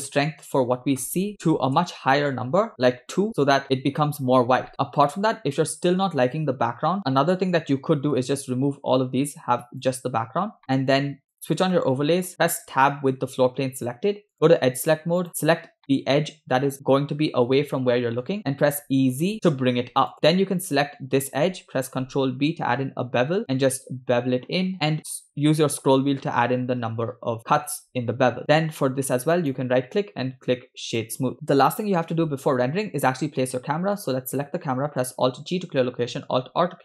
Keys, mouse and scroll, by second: 1.4 0, 1.6 0, 4.7-6.1 middle drag, 7.0 shift+click, 7.3 x, 9.0-10.1 drag, 10.6 shift+middle click, 11.3 click, 11.9 middle click, 12.3 Tab, 14.3 click, 15.3 click, 15.8-18.3 middle drag, 18.6 e, 20.1 Tab, 20.1 click, 22.8 ctrl+b, 28.4 Tab, 29.4 right click, 32.2 scroll up 1, 34.0 click, 35.4 alt+g, 36.7 alt+r.